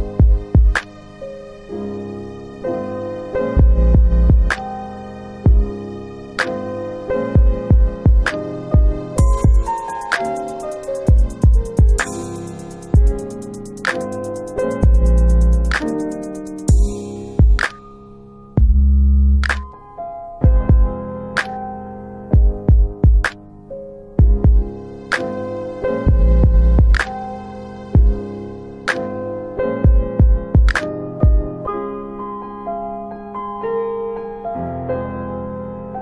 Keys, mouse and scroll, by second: 4.3-4.7 scroll down 1, 4.7 click, 7.3 click, 13.9 click, 20.5 click, 22.2 click, 24.6 click, 30.4 click, 33.1 click, 35.7 click.